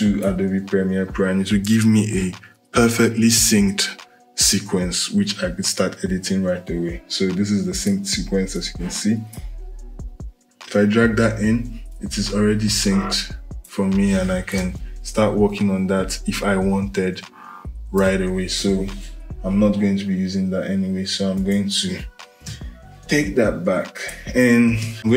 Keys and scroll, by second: 14.3 Return, 16.7 Return, 22.2 Delete, 24.5 Delete.